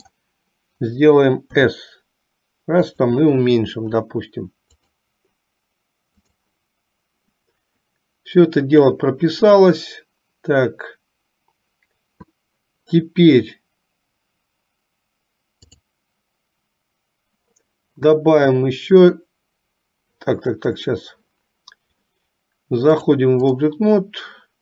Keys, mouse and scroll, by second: 5.0 click, 6.7 click, 15.8-17.7 drag, 23.0 click.